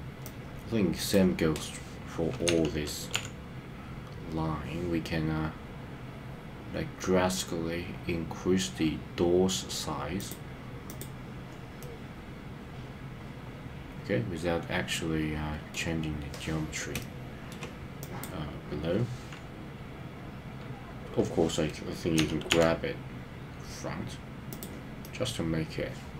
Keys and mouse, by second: 0.3 click, 2.4 g, 3.1 y, 10.1 click, 11.7-15.7 middle drag, 16.9 shift+middle click, 22.2 g, 22.6 y, 24.4 click, 25.0-26.1 middle drag.